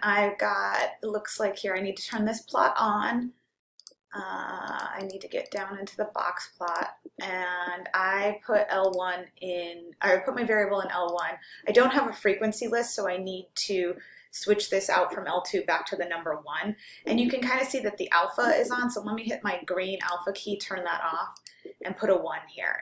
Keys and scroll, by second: 0.8 Return, 2.1 Return, 3.8 Down, 4.8 Right, 5.0 Right, 5.6 Right, 6.7 Return, 9.0 Down, 11.1 Down, 21.4 1.